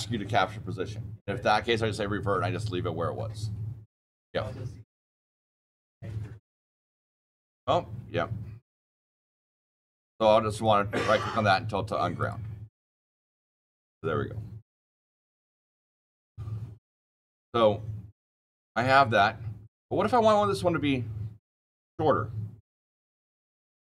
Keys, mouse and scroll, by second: 8.6 click, 9.2 click, 10.4 click, 12.1 click, 12.6 click, 13.1 click, 15.1 click, 15.5 click, 18.0 shift+middle click, 18.4 scroll up 10, 18.8 shift+click, 18.8 shift+click, 19.5 click.